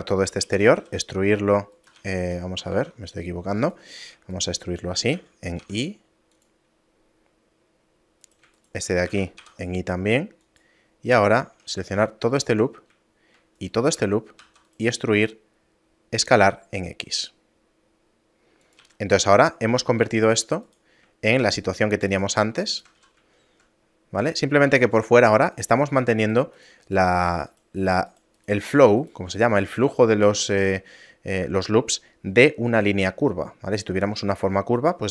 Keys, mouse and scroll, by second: 0.5 e, 0.8 s, 2.0 ctrl+z, 2.7 ctrl+Tab, 4.0 right click, 4.4 shift+right click, 5.2 e, 8.3 right click, 8.6 shift+right click, 9.1 e, 11.1 right click, 12.0 alt+right click, 13.6 alt+shift+right click, 14.5 e, 15.1 s, 18.8 a, 20.1 ctrl+Tab, 20.7 right click, 21.7 shift+right click, 22.1 right click, 23.1 a, 23.4 shift+middle click, 23.9 scroll down 2, 24.7 ctrl+Tab, 25.6 right click, 25.9 shift+right click, 26.2 right click, 26.8 right click, 27.2 right click, 27.8 right click, 28.1 right click, 28.4 right click, 28.7 shift+right click, 29.0 shift+right click, 29.7 a.